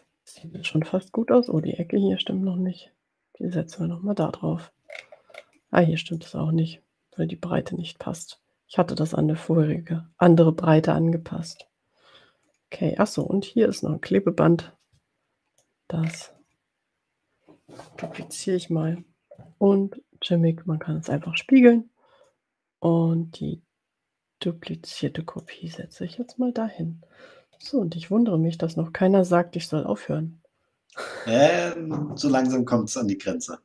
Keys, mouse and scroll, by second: 0.4 ctrl+scroll up 2, 1.6-4.5 drag, 5.2-5.6 ctrl+scroll up 4, 6.3 click, 11.6 ctrl+scroll down 2, 13.4 click, 13.7-15.8 drag, 16.0-16.7 ctrl+scroll up 3, 18.9 ctrl+d, 21.2 click, 22.3-25.2 drag, 25.8 click, 26.2-26.9 ctrl+scroll down 2.